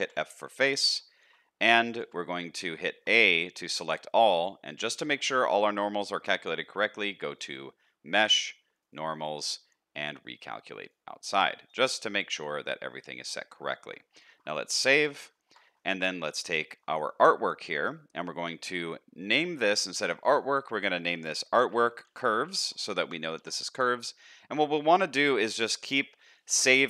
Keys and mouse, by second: 0.0 f, 0.4 middle click, 1.2 shift+middle click, 2.0 a, 2.3 middle click, 2.8 shift+middle click, 3.2 middle click, 4.0 shift+middle click, 5.2 middle click, 6.0-11.6 middle drag, 12.3-13.5 middle drag, 13.8 Tab, 14.1 middle click, 14.9 ctrl+s, 15.3 shift+middle click, 15.6 middle click, 16.6 shift+middle click, 21.3-24.6 shift+drag, 24.6 middle click.